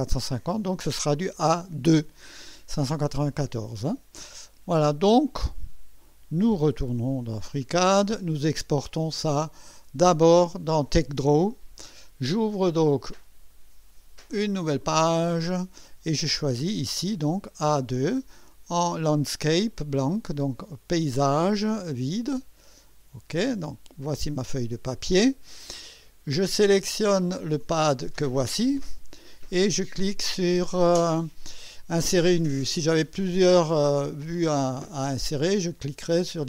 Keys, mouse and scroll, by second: 7.8 click, 14.6 click, 16.3 scroll down 2, 21.2 click, 22.7 click, 27.3 click.